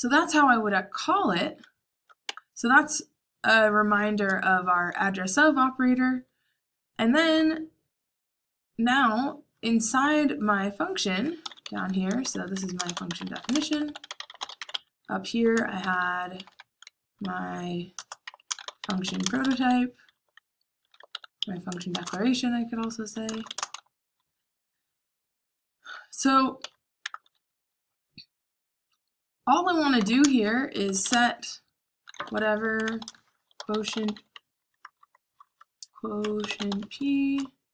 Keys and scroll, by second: 0.0-1.5 typing, 2.2 Tab, 11.3-13.6 typing, 15.5-22.3 typing, 26.5-27.4 typing, 29.9-37.7 typing.